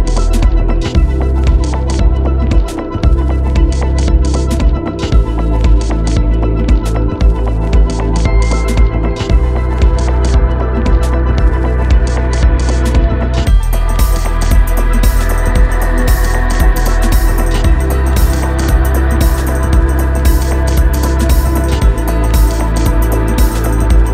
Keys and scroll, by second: 23.9 alt+shift+Delete.